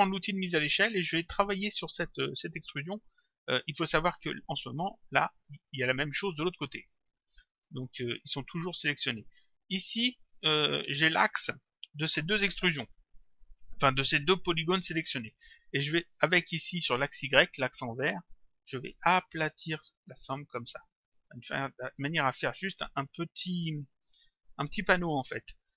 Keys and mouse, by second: 0.8 click, 4.2 click, 8.3 click, 18.2 click.